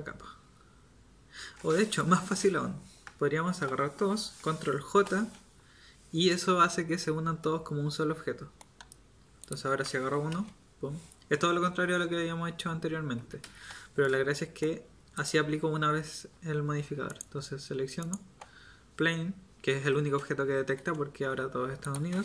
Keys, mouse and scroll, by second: 5.0 ctrl+j, 10.3 g, 21.8 right click.